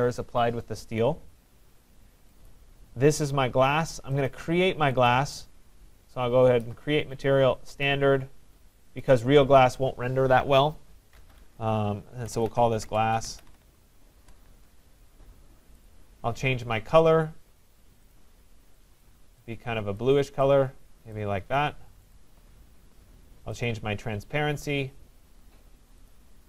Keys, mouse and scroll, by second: 2.5 click, 4.3 click, 5.1 right click, 7.9 click, 9.1 click, 9.3 click, 12.1-14.2 typing, 15.9 click, 18.2 click, 18.9-19.7 typing, 19.1 click, 20.0 click, 21.2 click, 22.2 click, 23.7 click, 26.2 click.